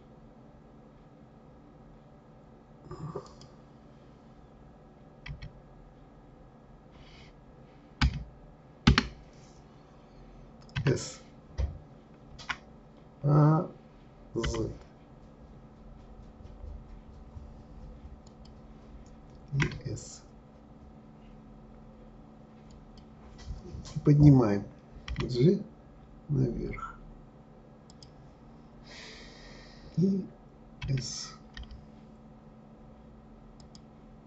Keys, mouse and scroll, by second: 5.2 s, 25.1 g.